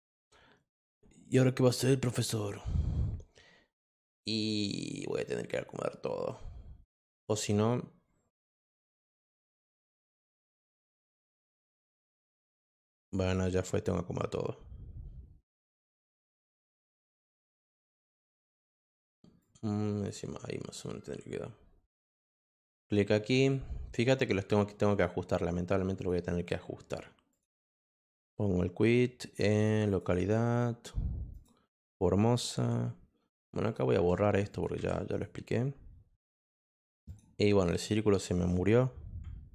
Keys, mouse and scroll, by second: 8.6 click, 12.9 click, 16.3 click, 19.4 click, 22.6 click, 24.9 click, 25.9 click, 27.3 click, 28.1 click, 29.9 click, 31.3 click, 33.6 click, 34.5 click, 35.1 click, 37.0 click.